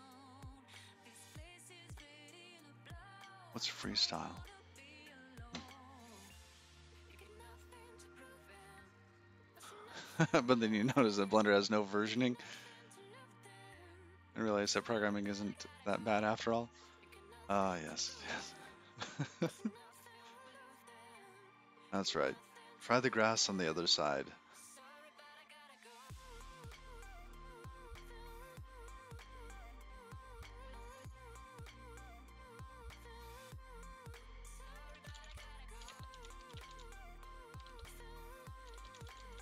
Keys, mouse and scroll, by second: 0.6 scroll down 9, 1.8-4.0 scroll down 4, 4.0-4.5 scroll down 4, 4.5 click, 4.9-5.5 scroll down 8, 20.8 click.